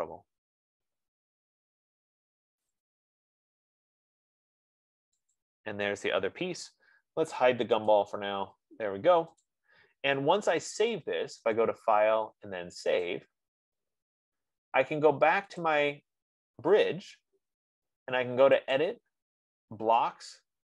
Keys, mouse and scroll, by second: 3.0 click, 3.4-3.8 scroll, 5.7 click, 8.4 click, 8.9 middle click, 9.1-9.8 scroll, 9.9 click, 11.3 F15, 11.8 scroll, 12.0 click, 13.5 click, 19.1 click.